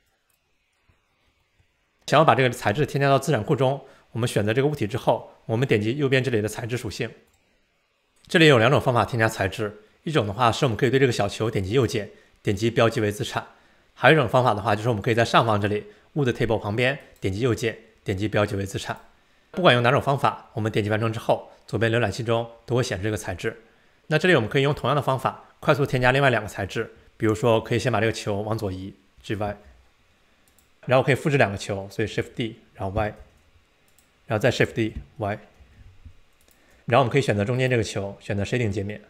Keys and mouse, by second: 0.0 click, 0.3 click, 1.4 middle click, 11.7-13.9 right drag, 17.1-19.4 right drag, 24.0 super+s, 29.2 g, 30.8 d, 32.4 shift+d, 34.9 shift+d, 37.5 click.